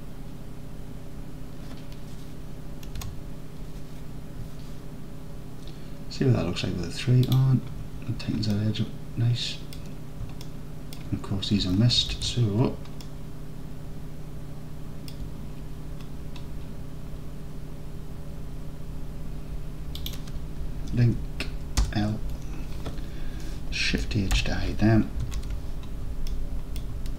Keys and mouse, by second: 3.0 Tab, 8.6-9.8 alt+drag, 10.4 alt+click, 11.7 Tab, 12.2 alt+z, 13.1-15.1 alt+drag, 20.0 click, 21.9 l, 24.4 shift+h, 25.4 alt+z.